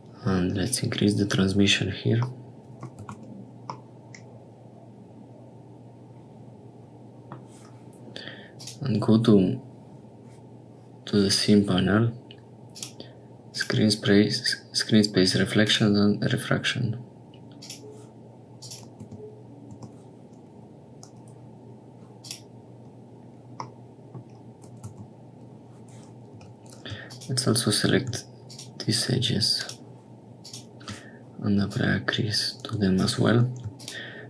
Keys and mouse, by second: 2.4 middle click, 3.0 Tab, 3.7-7.3 middle drag, 8.5 click, 12.7 click, 13.5 click, 15.6 click, 17.5 click, 18.6 click, 19.2 Tab, 20.3 Tab, 23.6 click, 24.9 Tab, 26.3 2, 31.6-32.9 drag, 33.3 3.